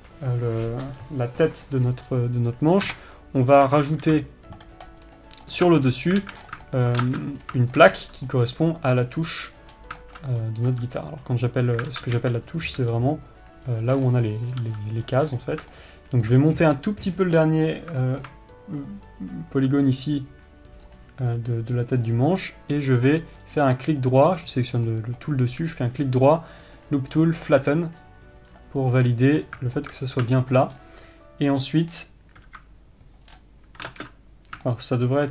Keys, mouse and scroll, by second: 2.6 scroll up 2, 4.2 KP_1, 5.6-6.0 scroll up 2, 6.0 click, 6.2 Tab, 6.4 scroll up 2, 6.9 scroll down 2, 7.2-14.3 shift+middle drag, 16.2-24.0 middle drag, 24.0-25.4 right drag, 25.4 middle click, 26.3-29.6 right drag, 29.6-35.3 middle drag.